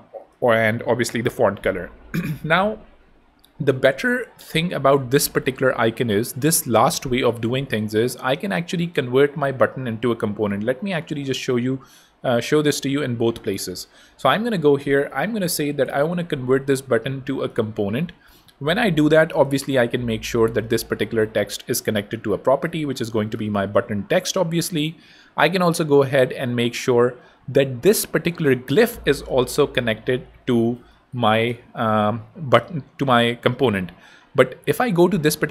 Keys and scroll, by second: 5.9 BackSpace, 7.5 BackSpace, 9.9 super+z, 13.8 shift+super+a, 14.9-16.0 typing, 22.5 super+a, 22.7-23.7 typing, 30.4 super+a, 31.0-31.9 typing.